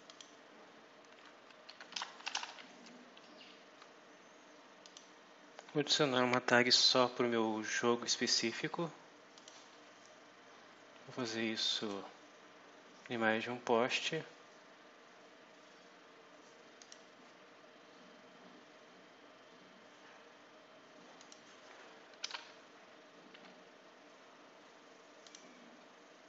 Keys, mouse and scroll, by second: 0.0 click, 1.6 Home, 1.6-2.9 typing, 4.7 click, 9.2 click, 11.6 click, 16.7 click, 20.1-21.1 scroll down 2, 21.1 click, 22.1 m, 23.2 y, 25.1 click.